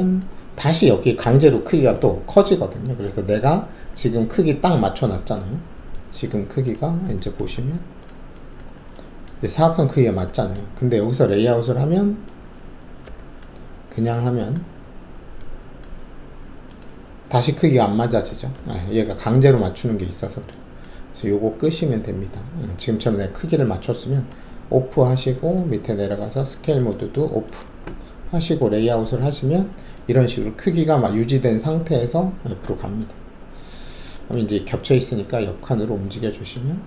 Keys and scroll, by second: 7.5 alt+`, 13.0 alt+4, 18.5 ctrl+z.